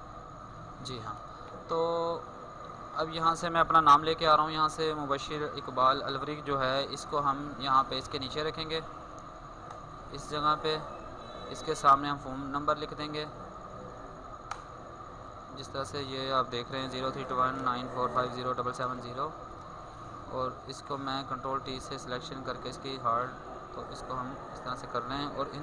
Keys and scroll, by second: 5.0 ctrl+x, 6.1 ctrl+Tab, 6.2 ctrl+v, 6.4 ctrl+t, 20.5 ctrl+t, 23.1 ctrl+t.